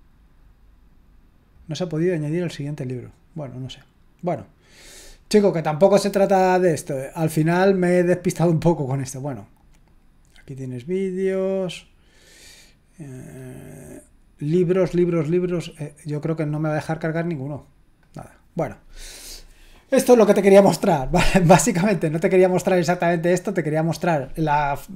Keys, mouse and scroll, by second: 1.5 click, 2.9 click, 4.3 click, 6.3 click, 7.6 click, 9.0-10.1 drag, 11.0 click, 12.4 click, 15.9 click, 16.1 click, 18.0 click, 22.0-23.0 drag, 23.6 click.